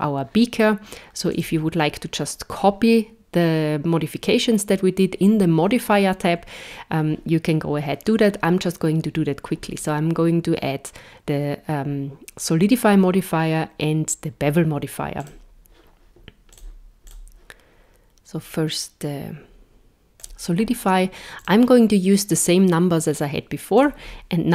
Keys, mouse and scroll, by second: 1.3 click, 15.2 click, 16.5 click, 17.1 click, 21.4 click.